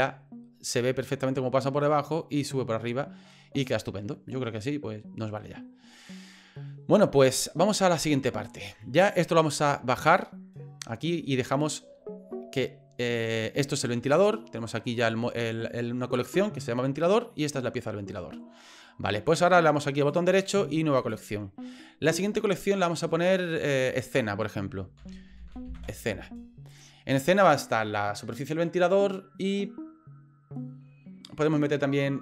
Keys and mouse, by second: 4.3-5.4 middle drag, 6.1 middle click, 7.7 middle click, 17.0-18.4 middle drag, 20.0-21.1 right drag, 24.1-26.8 drag.